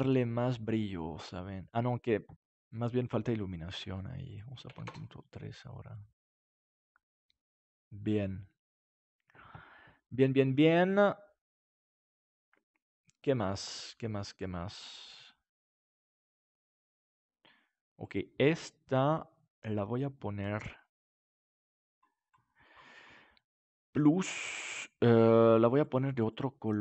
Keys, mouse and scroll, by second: 2.9-4.9 drag, 5.9 click, 21.8-25.1 drag, 26.4 right click, 26.6-26.8 drag.